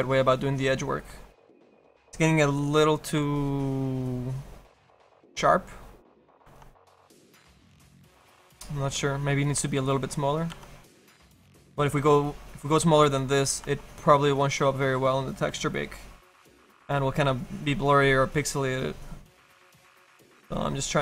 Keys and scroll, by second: 1.9 s, 15.5 s.